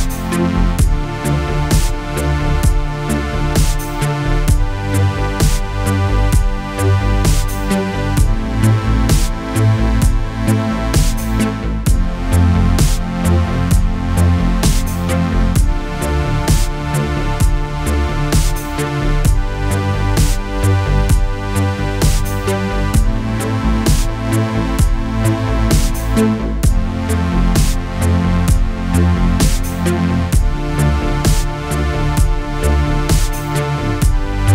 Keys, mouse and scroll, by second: 26.4 click, 28.7 ctrl+d, 30.6 click, 32.7 click, 33.9 ctrl+d.